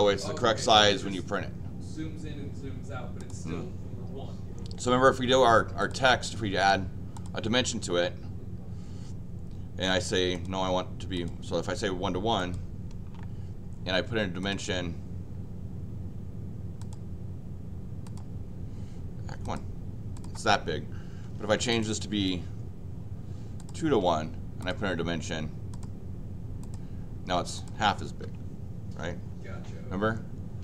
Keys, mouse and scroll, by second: 3.2 click, 5.9 click, 7.1 click, 10.3 click, 11.1 click, 12.4 click, 14.4 click, 18.0 click, 19.4 click, 20.1 click, 21.4 Escape, 21.7 click, 23.6 click, 24.6 click, 25.7 click, 26.6 click, 27.5 click, 28.0 Escape.